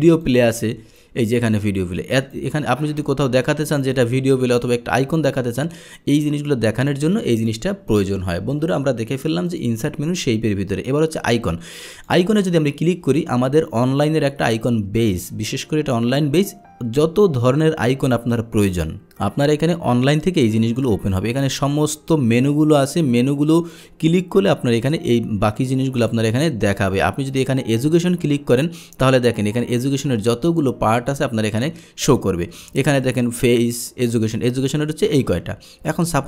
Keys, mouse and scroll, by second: 0.3 click, 1.0-2.4 drag, 3.9 click, 4.6 drag, 5.3 click, 7.0 click, 7.9 click, 8.6 Delete, 9.0 Delete, 9.5 click, 12.0 click, 21.2-23.8 drag, 26.2 click, 27.3 click, 29.6-30.3 scroll down 4, 30.3 middle click, 30.8-31.2 scroll down 2, 31.6-32.0 scroll up 2, 32.1 middle click, 32.7 middle click.